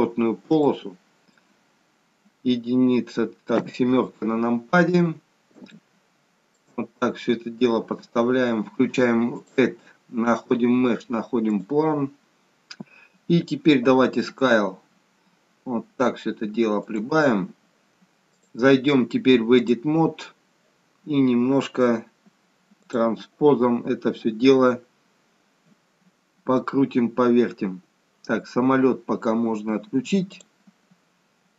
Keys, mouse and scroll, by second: 0.6 shift+middle click, 3.5 KP_7, 5.0-5.4 scroll down 1, 5.7 shift+middle click, 6.9-7.5 scroll up 1, 7.5 scroll down 1, 7.7-8.0 scroll down 1, 9.3 click, 18.2 click, 22.8 click, 24.6 scroll up 2, 26.7-29.9 scroll up 1, 30.4 click.